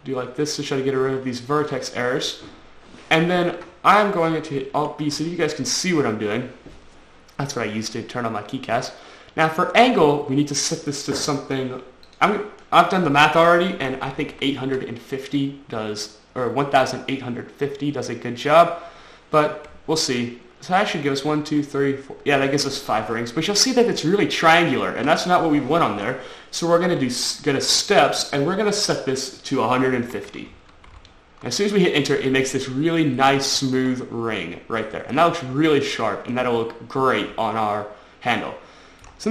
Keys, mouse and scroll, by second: 2.5-2.8 scroll up 3, 2.9-3.2 scroll down 2, 5.4 alt+b.